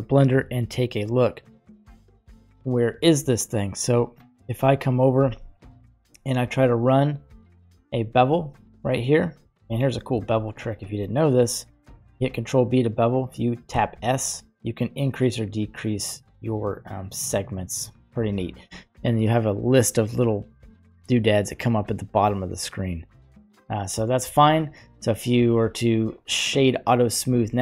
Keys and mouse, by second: 1.6-3.7 drag, 4.6 Tab, 6.4 ctrl+b, 8.2 Tab, 8.9-9.5 middle drag, 9.9 ctrl+z, 10.1 ctrl+z, 12.1 ctrl+b, 24.3 Tab, 25.4 q, 27.5-27.6 middle drag.